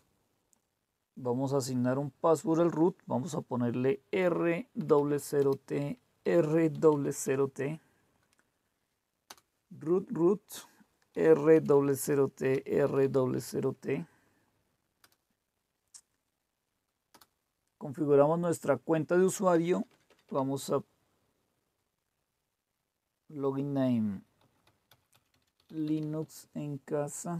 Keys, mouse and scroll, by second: 4.1-7.7 typing, 9.3 Return, 10.9-13.8 typing, 14.9 Return, 17.2 Return, 19.6-20.2 typing, 24.1-26.8 typing.